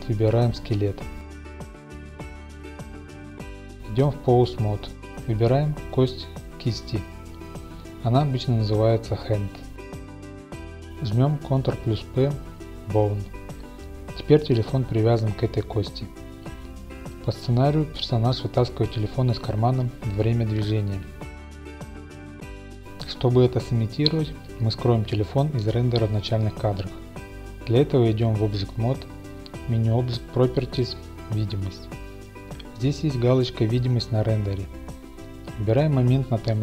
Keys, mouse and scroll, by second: 4.1-6.0 drag, 6.0-6.7 scroll down 1, 6.7-7.2 scroll down 2, 6.8 middle click, 7.0 middle click, 7.2-8.4 middle drag, 8.4-15.9 drag, 10.2 ctrl+p, 17.0 click, 17.1-18.4 scroll down 1, 17.2 typing, 18.4 scroll down 1, 19.5-21.1 drag, 21.9-22.4 scroll down 1, 21.9 typing, 22.4 middle click, 23.0-24.3 drag, 25.9-27.1 drag, 28.7-30.7 drag, 30.7 scroll, 30.7-31.3 scroll, 31.3-36.6 drag.